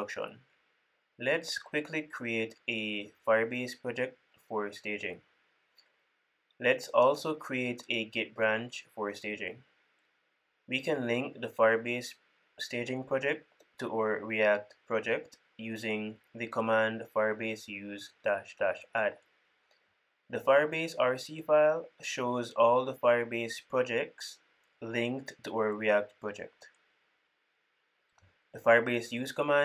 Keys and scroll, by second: 22.6 super+p.